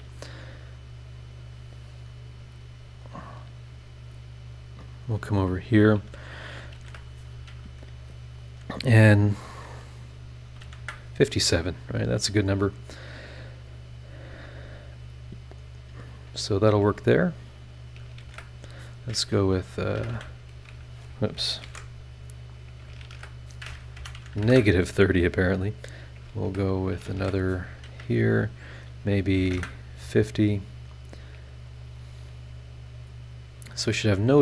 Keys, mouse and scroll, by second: 1.0-3.0 drag, 4.4-5.9 drag, 5.9 middle click, 6.2 shift+click, 6.7 shift+h, 10.4 KP_5, 10.6 KP_7, 10.8 KP_Enter, 14.6-16.6 drag, 17.8 shift+click, 18.2 shift+h, 19.9 KP_3, 20.0 KP_0, 20.1 KP_Enter, 21.6 ctrl+z, 22.5 click, 23.0 shift+h, 23.9 KP_Subtract, 24.3 KP_3, 24.4 KP_0, 24.4 KP_Enter, 25.7 click, 26.6 shift+click, 27.1 shift+h, 29.3 KP_5, 29.4 KP_0, 29.5 KP_Enter, 30.8 click, 31.7 click, 32.9 click.